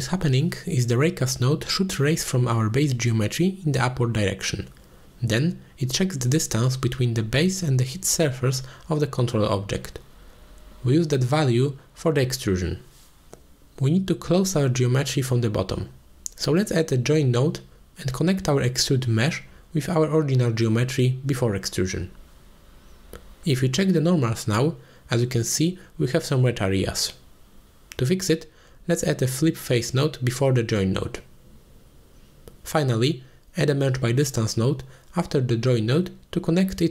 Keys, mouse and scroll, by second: 0.8 middle drag, 1.2 g, 1.2 z, 2.3 click, 2.5 Tab, 3.4 g, 8.6 Tab, 9.2 middle click, 9.7 s, 10.3 click, 11.1 h, 11.4-11.7 middle drag, 12.2-12.6 middle drag, 12.6 click, 13.1-13.6 middle drag, 14.3-14.9 middle drag, 15.2 shift+middle drag, 15.8 click, 15.9 middle click, 16.6 middle drag, 17.7-18.1 drag, 18.3 click, 18.8-21.1 drag, 21.3 click, 21.6 alt+shift+click, 22.7-24.0 drag, 24.5 middle click, 29.3 click, 29.8-30.7 middle drag, 30.8 click, 31.2 shift+a, 35.4 click, 35.9 click, 36.6 click.